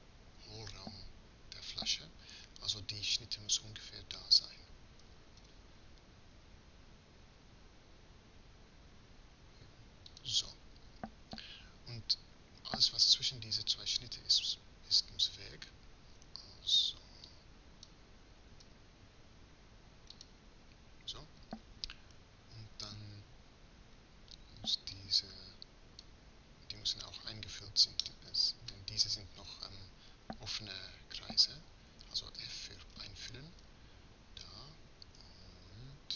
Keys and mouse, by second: 16.2 a, 29.1-32.4 middle drag, 32.4 f, 34.9 a.